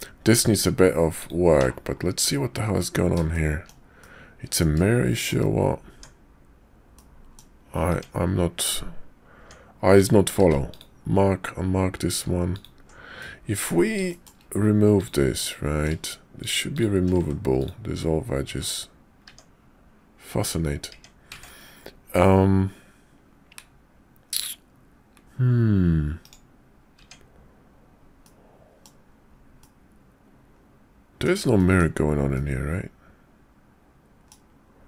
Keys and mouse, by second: 0.5 click, 1.1 click, 1.6 /, 2.2 click, 3.3 shift+click, 4.0 middle click, 5.1 shift+middle click, 5.9 Tab, 6.9 middle click, 7.9 Tab, 9.4 Tab, 9.9 click, 10.4 q, 12.5 alt+click, 13.2 click, 13.4 middle click, 14.1 shift+click, 15.0 click, 15.4 middle click, 16.4 shift+click, 16.7 shift+click, 17.1 x, 18.4 x, 19.3 Tab, 20.4 Tab, 20.9 Tab, 21.4 ctrl+`, 27.0 Tab, 28.2 middle click, 29.6-31.2 middle drag, 31.6 shift+middle click, 32.3-34.3 middle drag.